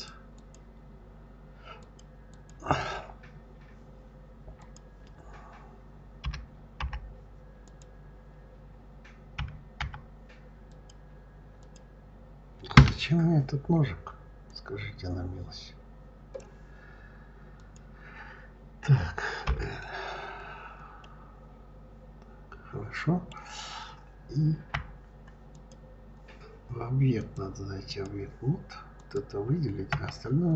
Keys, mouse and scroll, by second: 0.2 click, 1.6 click, 2.1 click, 4.4 click, 6.0 l, 6.6 k, 14.3-17.3 drag, 19.3 l, 20.8-23.8 middle drag, 24.5 KP_Divide, 25.4 click, 27.0-29.0 drag, 29.7 KP_Divide.